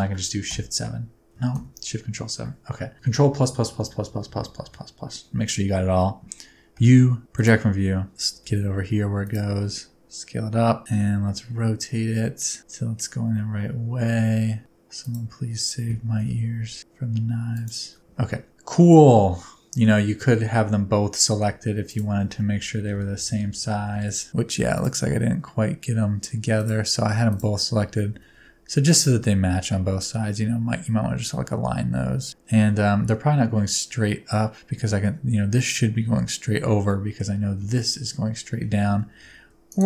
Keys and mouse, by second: 0.4 shift+KP_7, 2.9 ctrl+KP_Add, 3.2 ctrl+KP_Add, 6.7 u, 8.1 a, 8.5 g, 8.6 f, 9.4 click, 9.6 s, 10.8 g, 10.9 r, 15.0 right click, 16.0 g, 17.5 shift+click, 18.0 Tab, 18.2-19.8 middle drag, 20.1 Tab, 21.8 shift+click, 22.8 ctrl+KP_Add, 23.1 ctrl+KP_Add, 24.7 click, 26.6 click, 27.3 click, 28.1 s, 29.1 g, 36.8 middle click, 38.8 a, 39.3 s.